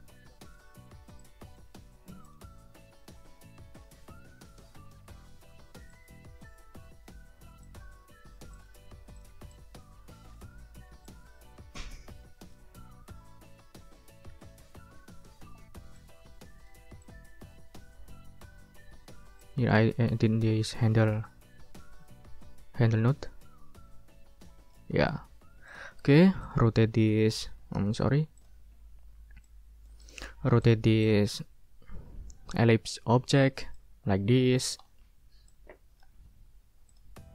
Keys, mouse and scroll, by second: 0.6 click, 1.2 click, 2.2 click, 3.1-3.7 ctrl+scroll down 4, 5.9-7.0 shift+drag, 7.2 ctrl+shift+z, 7.6 ctrl+click, 8.5 click, 9.2 click, 9.5 click, 11.0-12.7 shift+drag, 14.3 ctrl+z, 16.0 shift+click, 17.0 shift+click, 19.4-24.9 shift+drag, 25.7 click, 26.0 ctrl+scroll down 2, 27.5 ctrl+scroll up 2, 27.9 ctrl+click, 28.4 ctrl+click, 28.7 ctrl+scroll up 2, 29.4 click, 30.2 ctrl+scroll down 3, 30.6 ctrl+click, 31.0 ctrl+click, 33.7-35.2 ctrl+drag, 35.5 click, 36.9 click.